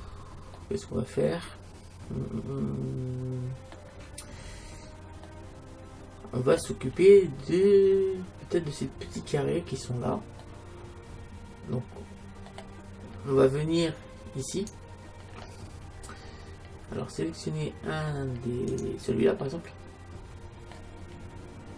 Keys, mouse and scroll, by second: 3.0 middle click, 4.3-9.1 middle drag, 10.5-12.3 middle drag, 13.6 middle click, 14.5-16.4 right drag, 15.4 middle click, 16.1 middle click, 17.0-18.7 middle drag, 18.8 right click, 19.6 click, 20.6-21.7 middle drag.